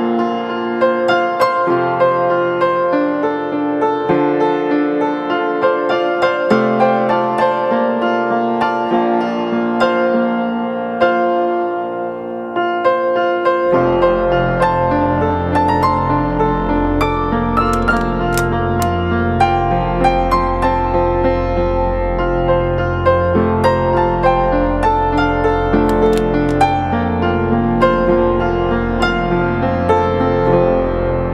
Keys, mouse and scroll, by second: 5.3-8.4 typing, 19.0 typing, 22.7-23.4 typing.